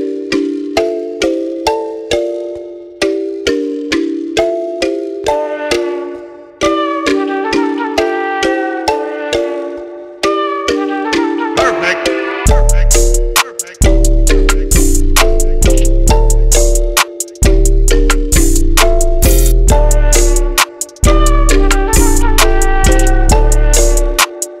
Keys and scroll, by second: 2.1-2.6 typing, 3.5 Return.